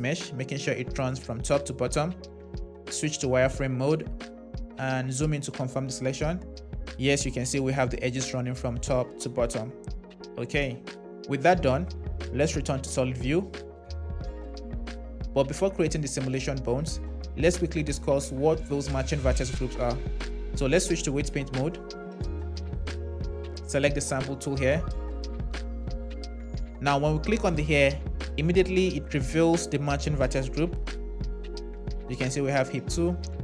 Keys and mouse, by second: 2.9 shift+z, 4.1 KP_3, 12.4 z, 20.4 Tab, 23.7-25.9 drag, 27.3-33.4 drag.